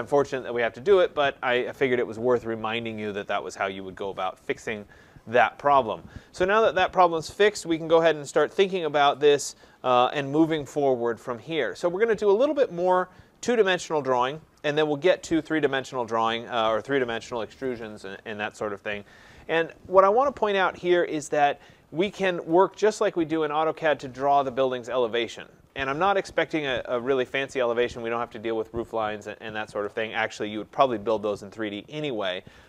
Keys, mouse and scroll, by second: 21.3-22.2 scroll, 22.2-25.3 scroll, 25.3-26.6 scroll, 31.7 scroll, 32.5 middle click.